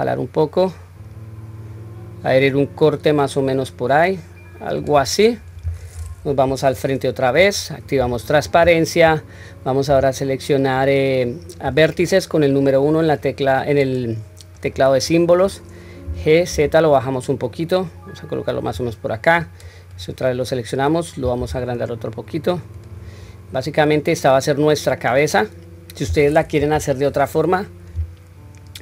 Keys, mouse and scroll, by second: 5.2-5.7 middle drag, 6.3 KP_1, 7.0 scroll up 1, 8.0 scroll up 1, 8.0 q, 9.9 1, 13.1-14.7 drag, 19.2 click, 21.4 s, 23.3-23.8 scroll down 2, 23.7-24.8 middle drag, 25.0-26.2 middle drag, 26.6 KP_3.